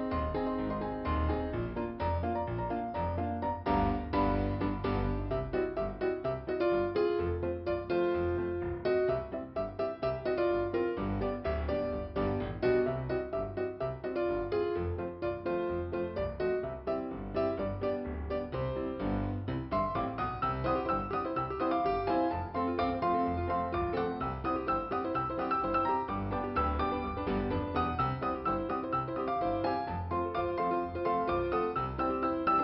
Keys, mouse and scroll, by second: 0.3 click, 0.6 scroll up 1, 2.2 click, 4.1 click, 6.0 click, 8.8 click, 10.1 click, 12.5 click, 12.6 click, 14.4 click, 15.7 click, 21.7 click, 23.4 click, 24.8 click, 27.5 click, 28.7 click, 29.8 click, 31.5 click, 32.5 click.